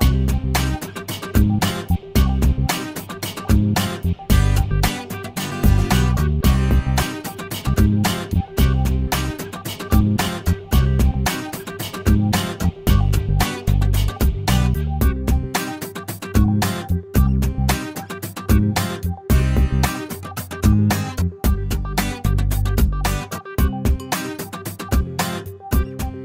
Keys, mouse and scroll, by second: 2.3 click, 2.9 click, 3.3 scroll down 2, 3.6 middle click, 4.0 click, 4.6-5.0 scroll up 2, 6.3 click, 7.2 click, 8.1 shift+o, 8.5-9.1 shift+middle drag, 9.2-9.6 shift+scroll up 1, 11.1-12.0 drag, 12.7 click, 13.8 click, 14.4 shift+o, 15.8 click, 16.8 click, 17.3 shift+o, 17.7 shift+scroll down 1, 18.0 shift+middle click, 18.9-19.3 shift+scroll up 1, 20.2 click, 21.3 click, 21.7 shift+o, 22.1 shift+scroll down 1, 22.3-23.2 shift+middle drag, 23.2-23.6 shift+scroll up 2, 25.4 click, 26.0 shift+click.